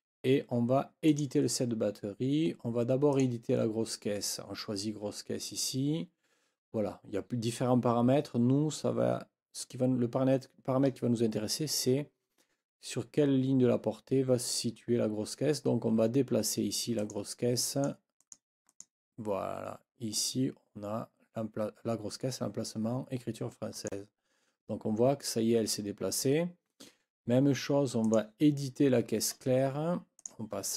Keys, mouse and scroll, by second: 1.1 click, 3.1 click, 17.0 click, 17.7 click, 18.2 click, 18.7 click, 23.8 click, 28.0 click, 29.4-29.7 scroll down 1, 30.2 click.